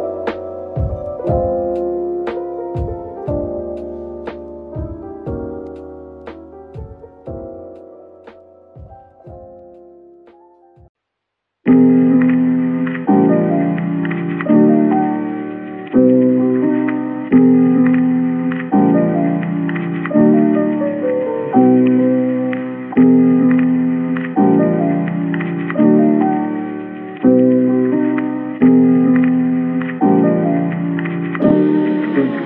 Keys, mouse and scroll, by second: 3.8-5.6 typing, 6.8 scroll up 1, 8.0-9.1 typing, 10.7 typing, 12.3 typing, 13.4 middle click, 14.3-14.9 typing, 16.9-17.4 typing, 18.9-19.3 typing, 20.5-21.5 typing, 21.6 middle click, 23.9-25.0 typing, 26.8 middle click, 28.8-30.4 scroll up 1, 31.5-32.4 scroll down 1.